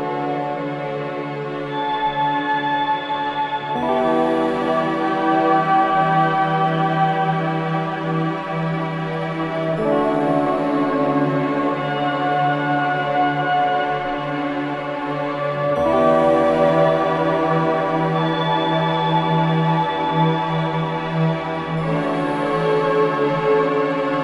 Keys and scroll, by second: 18.7 4, 21.3 F9, 22.1 2.